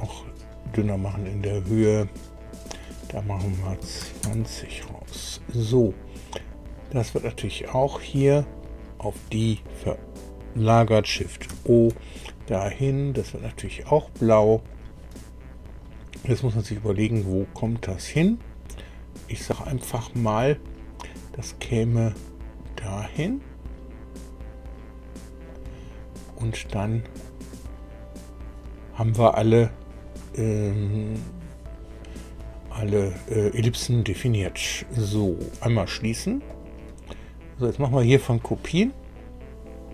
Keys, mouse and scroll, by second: 2.3 click, 3.8 KP_2, 4.0 KP_0, 4.2 KP_Enter, 6.4 click, 8.3 click, 11.4 shift+o, 13.1 click, 14.6 click, 16.7-25.7 drag, 26.3-27.4 middle drag, 36.5 click, 37.6 click.